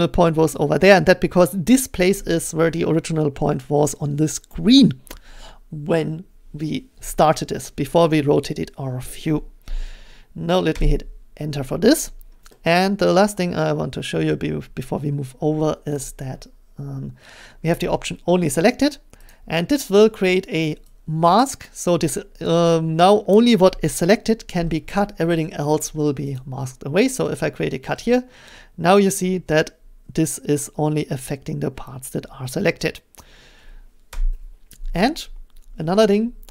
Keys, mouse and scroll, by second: 10.7 Return, 15.9 middle click, 19.3 click, 20.0 click, 21.6 click, 26.4 click, 31.4 click, 33.2-36.5 drag, 34.1 Return.